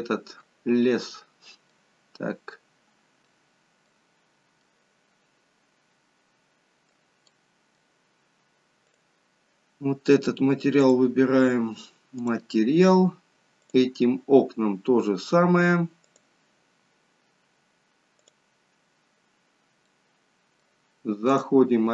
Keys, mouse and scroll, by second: 2.0 middle click, 2.1-2.6 scroll up 1, 2.6-3.0 scroll down 1, 3.3 middle click, 3.3-3.8 scroll down 6, 4.2-4.8 scroll up 1, 4.8 middle click, 4.8-5.1 scroll up 6, 7.4 middle click, 9.0 click, 10.9 click, 19.6-20.3 scroll down 2, 20.0 middle click.